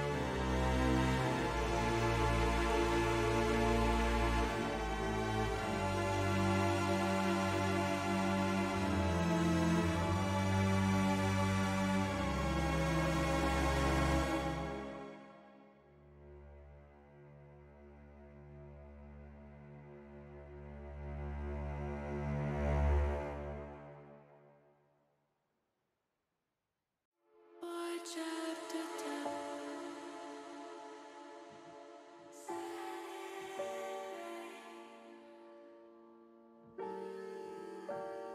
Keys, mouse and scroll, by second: 1.5-3.0 drag, 4.8 ctrl+z, 6.4 ctrl+z, 8.8 ctrl+z, 9.5 ctrl+z, 10.4 click, 11.0 click, 11.6 click, 15.9 click, 17.2 Tab, 19.5 middle click, 22.8 click, 23.5 Tab, 24.0 click, 25.0 q, 27.1 Tab, 27.5 middle click, 29.1 middle click, 29.5 middle click, 30.4 ctrl+r, 34.9 click, 37.2 ctrl+r.